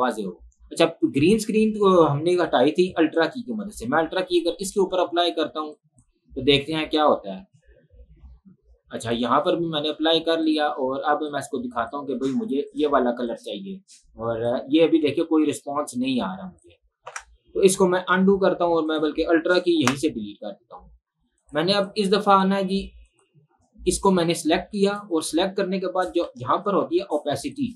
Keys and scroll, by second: 17.2 ctrl+z, 18.4 ctrl+z, 19.8 Delete, 26.8 ctrl+1, 27.0 ctrl+1.